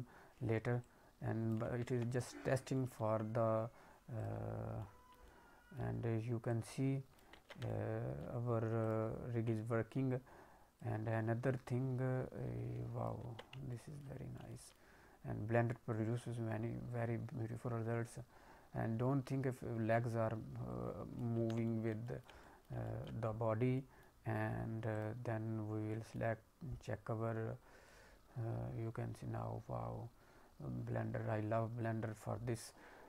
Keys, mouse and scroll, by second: 0.7 click, 1.9 ctrl+z, 1.9-2.2 ctrl+scroll down 3, 2.1 middle click, 2.7 alt+middle click, 4.1 click, 4.7 middle click, 5.2 alt+middle click, 6.4 click, 7.4 ctrl+z, 7.6 alt+middle click, 8.8 click, 9.5 alt+middle click, 10.8 click, 13.3 ctrl+z, 13.6 alt+middle click, 14.3 middle click, 14.6 alt+middle click, 15.8 click, 21.4 ctrl+z, 21.6 middle click, 22.0 alt+middle click, 22.4 middle click, 22.8 alt+middle click, 23.2-24.9 scroll down 4, 23.7 middle click, 25.8 middle click, 25.8 click, 27.8 click.